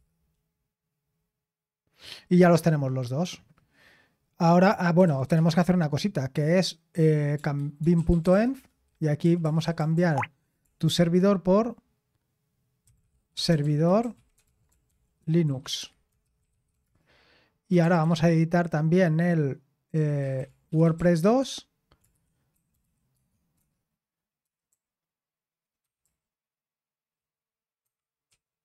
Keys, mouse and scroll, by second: 0.0-0.1 typing, 4.8-5.8 typing, 7.3-11.4 typing, 12.7-18.6 typing, 17.7 Return, 20.1-24.7 typing, 25.8-26.5 typing, 27.6-28.3 typing.